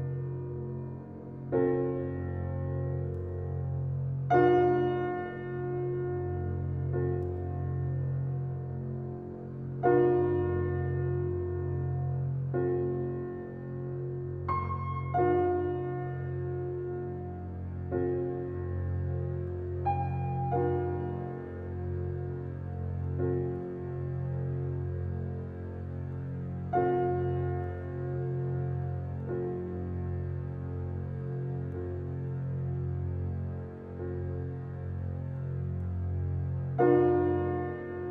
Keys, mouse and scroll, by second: 0.7-2.6 drag, 3.0-4.8 drag, 5.2 scroll down 5, 5.6 click, 6.1-8.0 drag, 8.3-9.9 drag, 9.9-10.4 scroll down 8, 11.5-16.9 drag, 17.2-19.1 drag, 22.1-24.0 drag, 25.0-26.9 drag, 27.7-30.6 drag, 32.0 scroll down 4, 34.0 scroll up 6, 34.1-35.2 scroll down 12, 35.4-35.9 middle drag, 36.6-37.2 right drag, 37.2-38.1 middle drag.